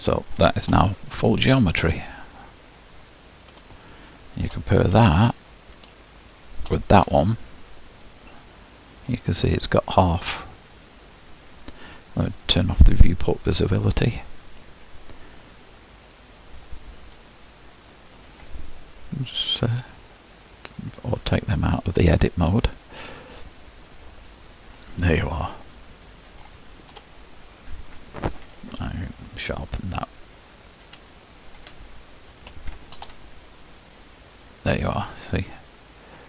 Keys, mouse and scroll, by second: 0.9 Tab, 1.6-2.7 scroll down 4, 2.7-3.7 drag, 3.7-5.1 shift+middle drag, 5.1 Tab, 6.2 shift+click, 7.3 Tab, 8.3-9.4 middle drag, 9.4-12.0 scroll up 2, 12.0-12.4 scroll up 1, 12.4-13.5 drag, 13.5-14.7 scroll down 1, 14.7-17.3 scroll down 1, 17.3 scroll down 1, 17.5-24.8 drag, 24.8-27.3 middle drag, 27.3 Tab, 27.9 click, 30.3 q, 30.9 q, 32.7 shift+click, 33.3 Tab, 34.1 click, 34.5-36.2 middle drag.